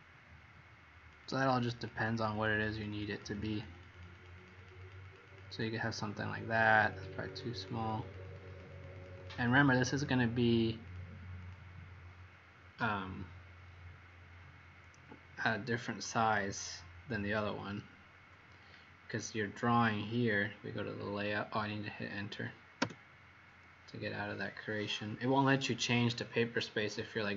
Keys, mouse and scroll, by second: 1.3 click, 1.7 click, 1.8 click, 2.3 click, 2.4 click, 2.7 click, 2.8 click, 3.1 click, 3.3 click, 3.6 click, 3.8 click, 4.3 click, 4.5 click, 4.7 click, 5.0 click, 5.2 click, 5.4 click, 6.8 click, 7.1 click, 7.5 click, 7.7 click, 7.9 click, 8.4 click, 8.6 click, 8.9 click, 9.1 click, 9.3 click, 9.7 click, 9.9 click, 10.8 click, 11.3 click, 17.5 click, 22.7 Return, 25.5 click.